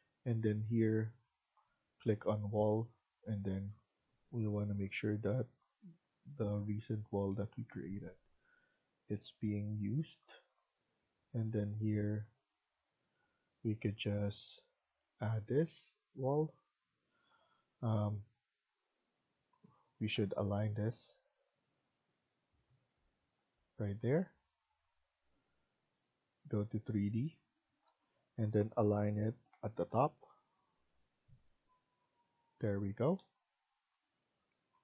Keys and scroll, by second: 15.2 Escape, 15.4 Escape, 15.6 Escape, 19.4-20.6 typing, 23.8 Escape, 25.2 Escape, 28.6-29.4 typing, 32.8 Escape.